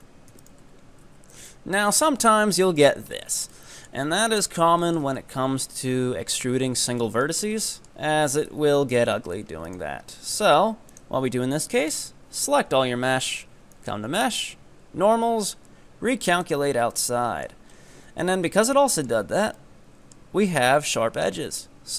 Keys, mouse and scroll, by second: 0.3 f, 0.5 right click, 0.7 Tab, 0.9 scroll down 1, 1.1 Tab, 1.5-1.9 middle drag, 1.9 Tab, 2.3 Tab, 2.4 middle click, 2.8-3.6 scroll up 7, 3.6 middle click, 4.0-4.9 scroll down 8, 4.9-8.5 shift+middle drag, 8.5 KP_Enter, 8.8 KP_3, 9.3 scroll up 3, 9.8 right click, 10.3 g, 11.2-11.9 scroll down 5, 11.9 a, 13.7-16.8 drag, 17.0-17.7 middle drag, 17.7-18.2 scroll up 4, 18.2 Tab, 18.4-21.1 middle drag, 21.1 Tab.